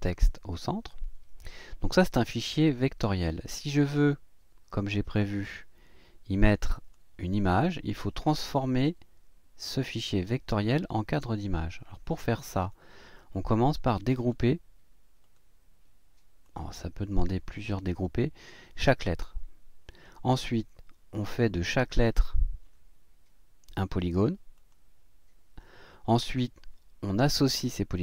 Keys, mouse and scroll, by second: 1.0 click, 4.1-5.4 drag, 6.7 click, 12.6 click, 14.2 click, 15.2 click, 16.4 click, 22.0 click, 24.6 click.